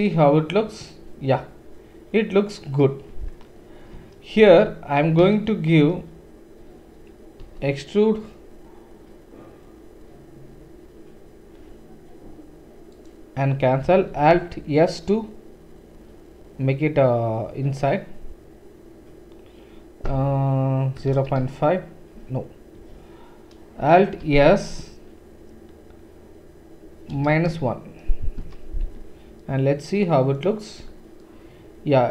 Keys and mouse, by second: 3.1 Tab, 4.3 alt+click, 4.4-7.4 alt+middle drag, 7.4 e, 14.1 alt+s, 24.1 alt+s, 28.8 Tab, 29.8-32.1 middle drag.